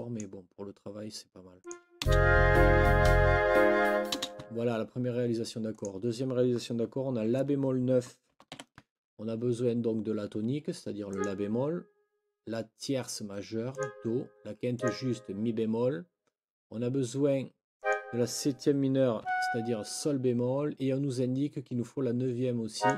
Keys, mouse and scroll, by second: 0.0-0.3 scroll up 2, 1.6 scroll up 1, 2.0 space, 4.1 space, 5.7 click, 8.3 n, 8.5 KP_7, 11.1 click, 13.7 click, 14.7 click, 17.8 click, 19.2 Down, 22.7 click.